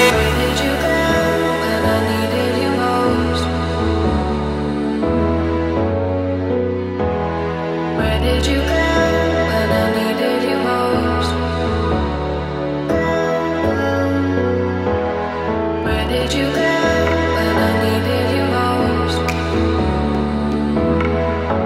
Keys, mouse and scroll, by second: 0.5 shift+d, 1.9 z, 2.5 click, 3.3 r, 4.9 ctrl+click, 5.8 KP_1, 6.5-6.9 scroll up 2, 6.9-7.6 shift+middle drag, 7.8-8.9 scroll up 2, 8.9-9.9 drag, 8.9-9.9 scroll up 1, 10.5 r, 13.6 click, 13.9 g, 15.5 click, 16.5 click, 18.3 r, 19.3 click, 20.1 g.